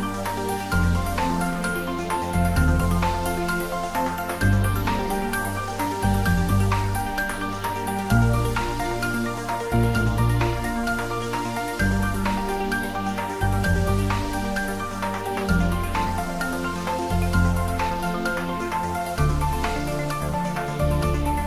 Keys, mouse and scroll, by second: 2.2-3.4 scroll down 2, 3.4-4.2 scroll down 1, 4.7 scroll down 1, 4.8-6.7 scroll up 1, 9.1 alt+shift+click, 13.4 click, 16.3 alt+shift+click.